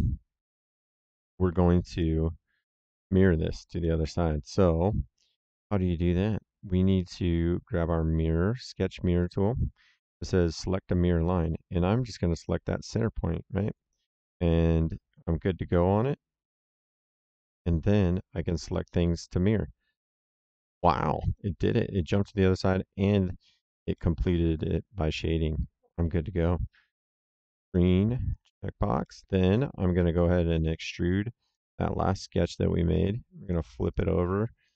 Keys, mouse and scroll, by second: 1.9 middle click, 3.7 middle click, 9.1 click, 12.3 click, 16.6 click, 18.8 click, 20.5 middle click, 21.1 right click, 22.6 middle click, 23.0 right click, 23.9 middle click, 27.5 click, 28.9 middle click, 29.5 d, 29.9 s, 33.4 click.